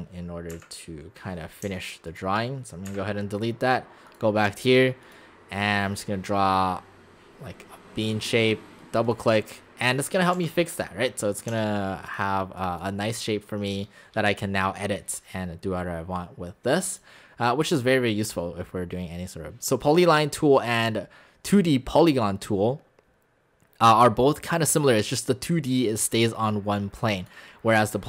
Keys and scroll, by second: 0.5 Delete, 1.7 x, 2.9 Delete, 10.4 Escape, 11.5 x.